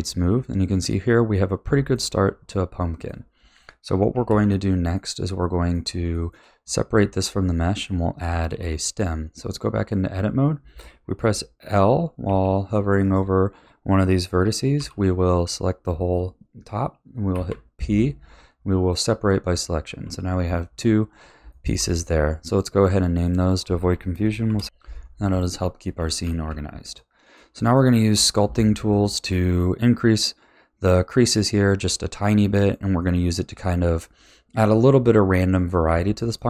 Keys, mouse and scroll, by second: 0.0-4.3 middle drag, 4.3 ctrl+s, 4.9-8.5 middle drag, 8.5 Tab, 12.2 k, 14.7 l, 17.3 p, 19.5 Tab, 20.5-22.4 shift+middle drag, 22.4 click, 23.2 click, 23.4-24.6 drag, 26.3 ctrl+s, 26.9-36.4 middle drag.